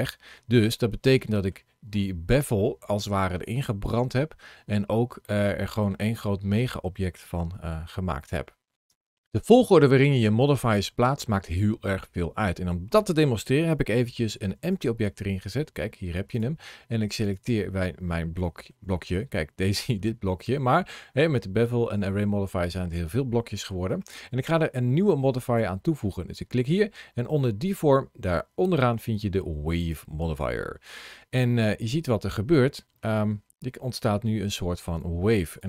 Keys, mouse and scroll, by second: 0.0-0.5 scroll down 1, 0.5 middle click, 1.8 scroll up 2, 2.4 middle click, 4.6 scroll down 2, 5.1 middle click, 6.1 scroll down 1, 7.4 Tab, 8.8 Tab, 9.2 middle click, 10.4 middle click, 14.6 g, 16.2 click, 17.1 click, 17.9 middle click, 22.4 middle click, 25.2 click, 31.5 middle click, 33.7 middle click, 35.4 click.